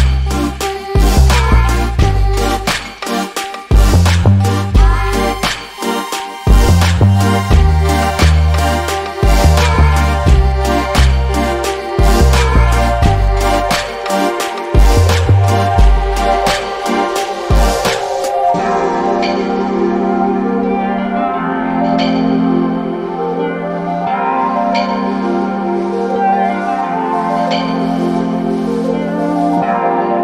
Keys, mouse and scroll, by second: 4.7 scroll down 1, 4.9 alt+click, 5.3 alt+right click, 5.7 click, 11.0 alt+click, 11.4-12.0 scroll down 1, 12.0 click, 13.4 alt+middle click, 13.7 alt+click, 14.5 alt+middle click, 14.8 alt+click, 15.3 alt+middle click, 15.7 alt+click, 17.6 scroll down 1, 17.9 alt+click, 19.8 n, 20.4 scroll up 1, 21.1 click, 21.9 alt+middle click, 22.3 alt+click, 22.9 alt+middle click, 25.7 alt+click, 25.9 alt+double click, 26.8 alt+middle click, 27.1 alt+click, 27.8 alt+middle click, 28.4 alt+click.